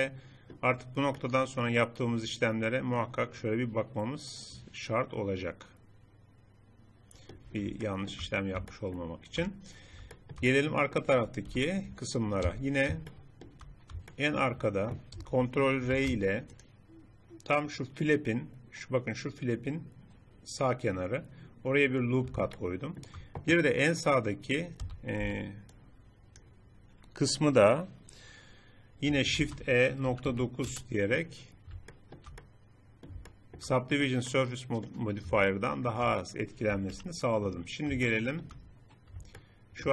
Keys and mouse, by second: 7.6 click, 10.3 middle click, 10.8 middle click, 11.6 KP_7, 12.5 z, 16.0 ctrl+r, 22.8 middle click, 24.8 a, 25.2 b, 29.4 shift+e, 37.0 KP_3, 37.8 middle click.